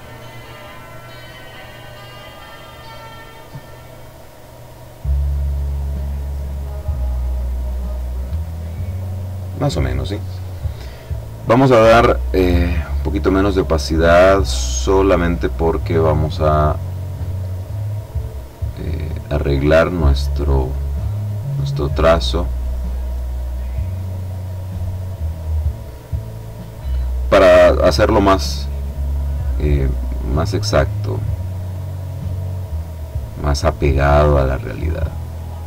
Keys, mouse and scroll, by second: 4.1 click, 5.1 click, 7.2 click, 11.8 click, 13.6 click, 16.4 click, 18.5 click, 21.1-26.0 drag, 29.3-31.8 drag, 32.3-33.9 drag.